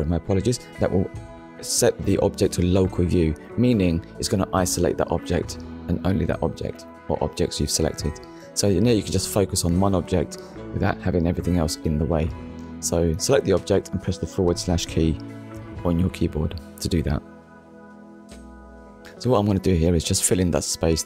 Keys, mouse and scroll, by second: 0.5 click, 1.7 middle click, 4.2 Tab, 4.8 Tab, 9.0 ctrl+a, 9.7 click, 11.0 Tab, 12.3 click, 14.9 alt+click, 16.8 shift+middle click, 18.1 click, 19.2 middle click.